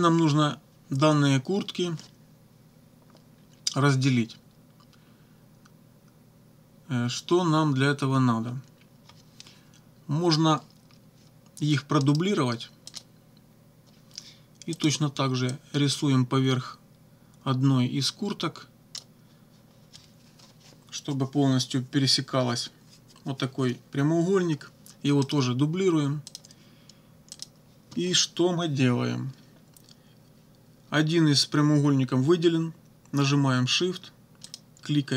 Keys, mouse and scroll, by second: 12.1 right click, 12.9 click, 14.7 click, 15.5-19.2 drag, 25.3 right click, 26.3 click, 27.4 click, 34.5 shift+click.